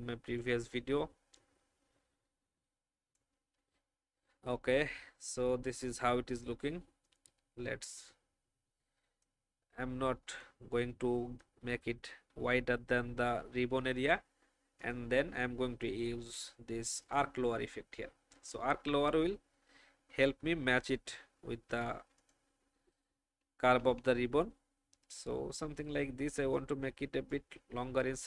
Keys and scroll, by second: 23.3 shift+Down, 23.9 shift+Down.